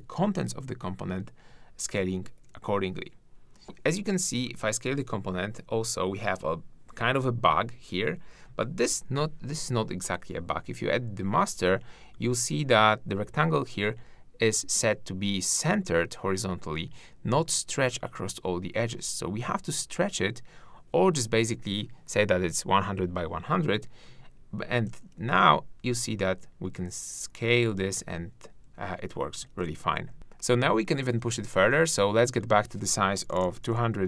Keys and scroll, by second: 29.5 super+z, 30.1 shift+`.